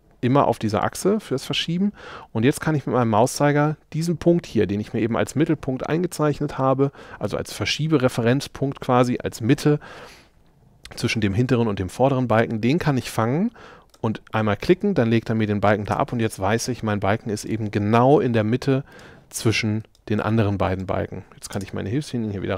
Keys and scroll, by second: 15.9 space, 21.6 space.